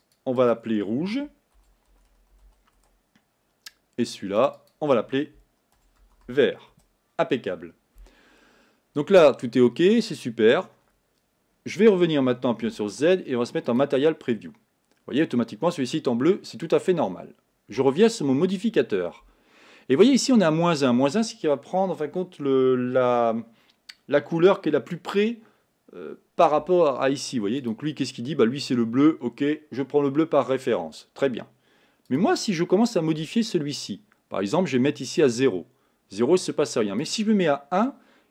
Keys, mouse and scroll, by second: 2.8-4.4 drag, 4.9-9.0 drag, 14.1 z, 15.3-35.4 middle drag, 35.4-38.3 drag.